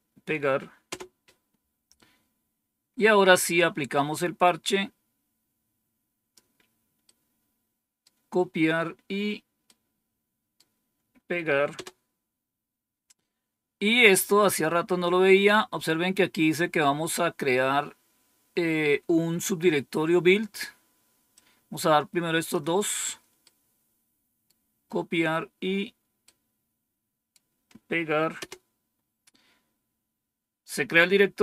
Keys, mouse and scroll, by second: 0.8 Return, 4.5-6.3 drag, 7.0-8.0 right drag, 9.6 right click, 11.6 Return, 14.7-15.7 scroll down 2, 21.2-22.5 drag, 23.3-24.4 right drag, 26.1-27.3 right drag, 28.3 Return.